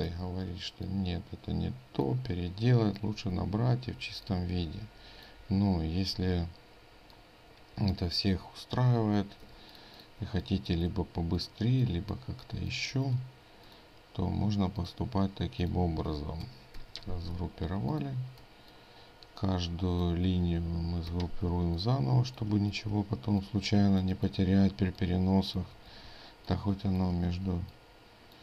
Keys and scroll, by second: 0.3 ctrl+z, 3.2 ctrl+g, 6.2 ctrl+g, 9.1 ctrl+g, 9.5 ctrl+space, 16.8 ctrl+shift+g, 17.4 ctrl+space, 21.2 ctrl+g, 21.2 ctrl+space, 22.7 ctrl+g, 27.3 ctrl+g.